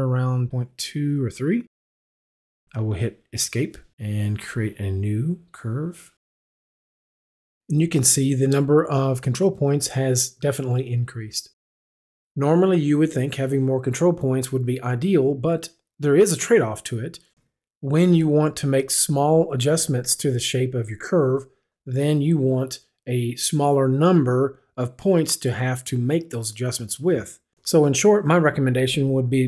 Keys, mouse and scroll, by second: 3.4 Escape, 4.2 click, 7.7 click.